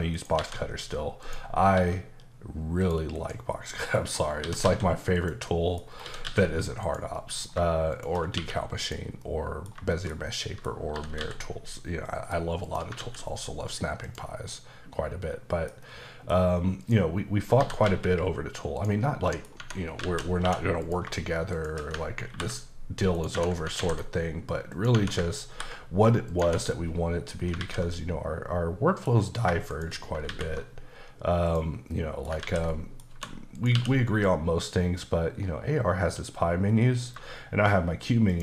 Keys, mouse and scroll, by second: 0.1 shift+right click, 0.4 shift+a, 1.2 click, 1.7 s, 2.8 click, 3.1 KP_Decimal, 3.5-4.4 scroll down 3, 3.7 middle click, 4.4 typing, 5.1 click, 5.4 middle click, 5.8 scroll down 2, 6.0 typing, 6.8 click, 7.1 middle click, 7.9 click, 8.3 q, 8.8 click, 9.2 middle click, 9.9 shift+middle click, 10.9 typing, 12.2 click, 12.6 click, 13.0 alt+x, 14.0 click, 14.5 middle click, 16.8 click, 17.4 scroll up 2, 17.6 typing, 18.7 click, 19.0 middle click, 19.6 Tab, 20.8 click, 21.5 shift+click, 22.3 ctrl+b, 23.1 right click, 23.3 Tab, 23.8 ctrl+a, 24.7 click, 24.9 Tab, 25.5 ctrl+b, 26.3 click, 26.4 Tab, 26.7 middle click, 27.6 alt+z, 27.9 middle click, 29.1-29.5 scroll down 2, 29.7 shift+click, 30.3 alt+x, 31.9 middle click, 32.4 ctrl+z, 32.7 middle click, 33.1 1, 33.5 click, 33.7 q, 38.3 shift+click.